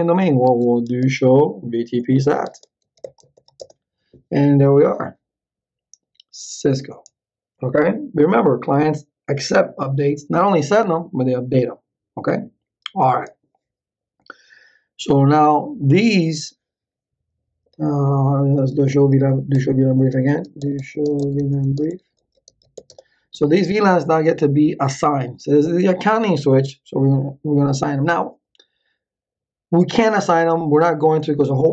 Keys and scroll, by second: 0.0-3.8 typing, 18.4-23.3 typing.